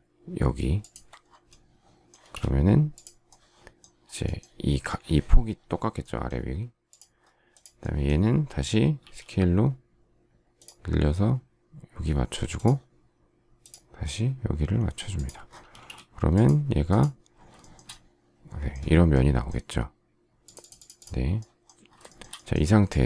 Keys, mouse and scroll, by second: 0.7 ctrl+click, 2.1 space, 8.9 s, 15.7 space, 17.5 shift+middle click, 22.0 shift+middle click.